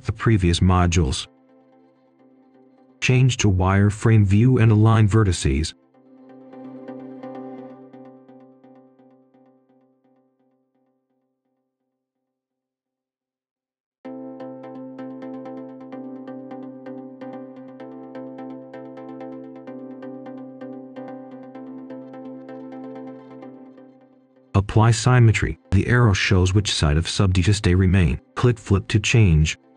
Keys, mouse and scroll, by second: 1.3 click, 3.0-4.1 scroll up 1, 4.4-7.7 ctrl+shift+drag, 8.0-12.0 ctrl+shift+drag, 12.4 right click, 13.9-14.6 scroll up 1, 14.6 right click, 16.2-16.6 scroll down 1, 16.6-17.7 scroll up 1, 19.6 click, 20.5-20.9 scroll down 1, 20.9 right click, 21.3 scroll down 1, 21.5 scroll up 1, 21.7 click, 22.4 typing, 23.1 Return, 23.8-24.7 scroll up 1, 24.7 click, 24.9-26.9 scroll down 1, 28.4 shift+click, 29.4 click.